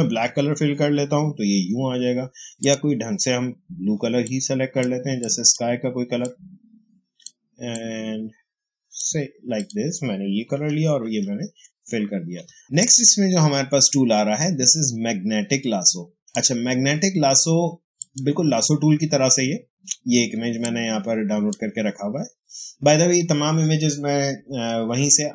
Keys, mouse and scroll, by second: 2.5-9.5 drag, 10.8 alt+BackSpace, 12.4 space, 12.7-17.9 drag, 20.2 space, 20.5 click, 20.7 space.